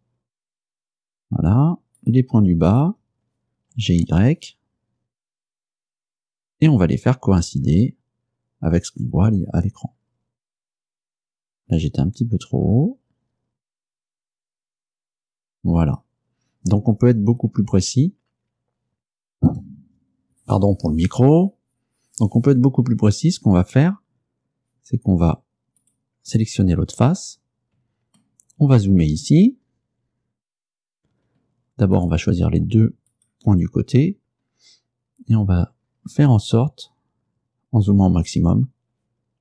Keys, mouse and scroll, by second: 1.0 click, 2.1 right click, 2.8 shift+right click, 3.6-4.5 typing, 15.9 click, 25.9 right click, 28.3 shift+middle click, 29.0-29.7 shift+scroll up 3, 31.0-31.5 scroll down 2, 32.1 right click, 33.2 shift+right click, 34.0-34.9 shift+scroll up 5, 35.9-36.7 scroll up 4, 36.3 middle click, 36.9-37.3 scroll up 2.